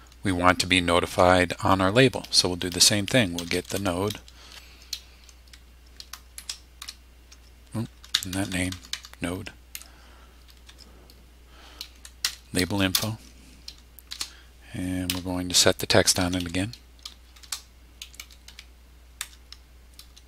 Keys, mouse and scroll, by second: 3.1-4.3 typing, 6.4 shift+-, 6.8 shift+n, 7.3 shift+Tab, 8.1 BackSpace, 9.7 o, 10.7 Tab, 12.2 Down, 12.9 Return, 14.1-19.2 typing.